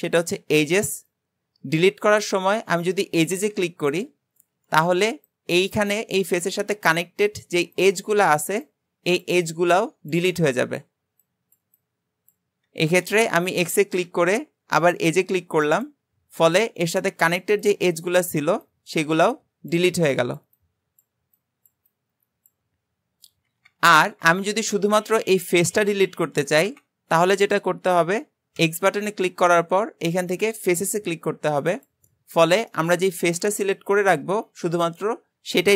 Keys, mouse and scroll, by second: 24.3 ctrl+z, 32.8-35.7 middle drag.